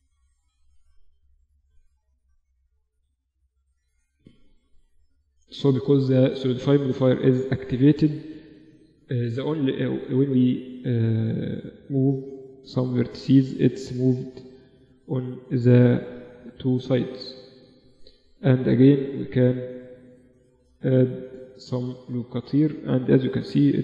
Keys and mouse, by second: 0.5 b, 2.5 b, 4.1 g, 7.2-10.0 drag, 9.8 a, 11.8 b, 14.0 g, 16.7-18.2 middle drag, 18.2 ctrl+r, 20.3 middle click, 21.4-23.8 middle drag, 21.6 a, 23.3 b.